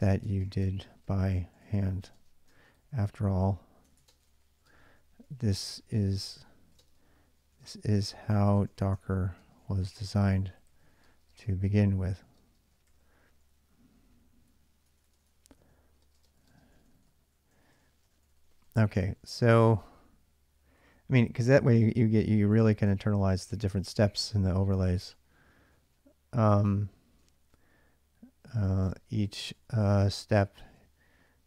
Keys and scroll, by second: 0.0-21.0 typing, 22.4-25.7 typing, 27.0 shift+a, 28.3-31.0 typing.